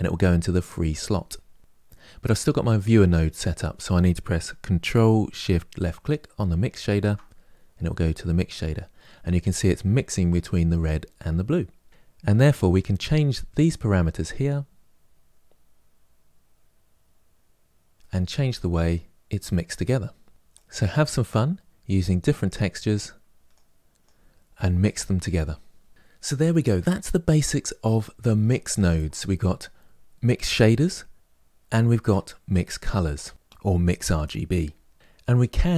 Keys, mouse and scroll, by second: 6.6 ctrl+shift+click, 13.6-16.6 drag, 18.0-20.3 middle drag, 20.7-23.4 drag, 25.9-35.0 middle drag, 35.0 click.